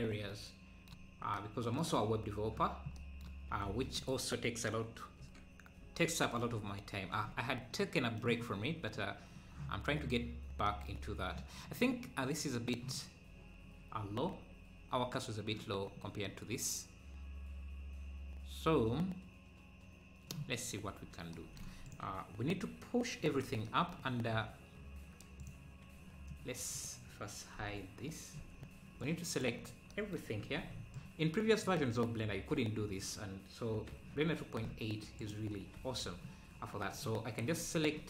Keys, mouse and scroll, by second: 1.1 scroll down 2, 3.8 ctrl+s, 4.0-5.2 drag, 5.2 KP_Decimal, 6.1 KP_Decimal, 7.5 scroll down 2, 7.8 middle click, 8.6 scroll down 3, 9.3-9.8 scroll up 1, 10.6 scroll up 1, 15.8-16.7 scroll up 3, 20.6 scroll down 1, 21.8-23.2 drag, 23.2 KP_3, 25.4-26.7 drag, 27.6 click, 27.6 h, 28.4 z, 29.0 click, 29.7 scroll down 2, 30.6 b, 33.9 Tab, 33.9 Tab, 35.2 shift+click, 35.8 Tab.